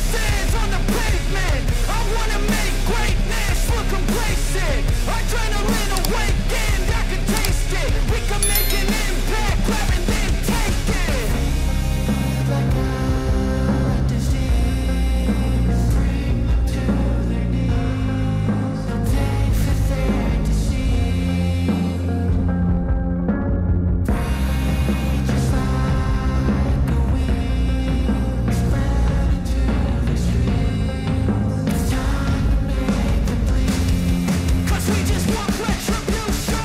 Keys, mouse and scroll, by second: 4.0 click, 5.0 right click, 5.7 click, 15.3 right click, 15.6-22.4 drag, 26.0-27.7 drag, 31.1-36.6 drag.